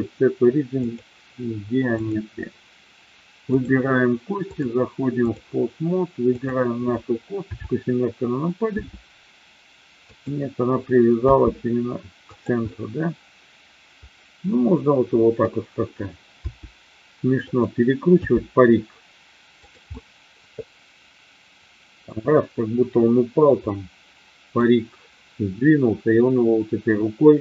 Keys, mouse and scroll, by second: 1.9 click, 3.6 click, 4.6-5.3 drag, 6.3 click, 7.3 KP_7, 8.7 r, 9.9 click, 11.1 g, 12.2 click, 12.7-15.3 middle drag, 16.4 r, 17.4 click, 18.1 g, 19.6 click, 19.8-22.1 middle drag, 23.6-24.6 middle drag.